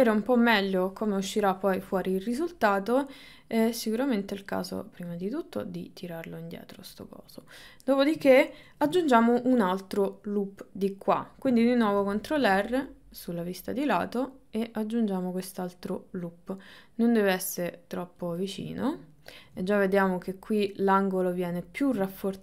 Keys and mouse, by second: 3.8 click, 5.2-6.8 drag, 11.9 ctrl+r, 18.9 ctrl+middle click, 22.2 shift+middle click.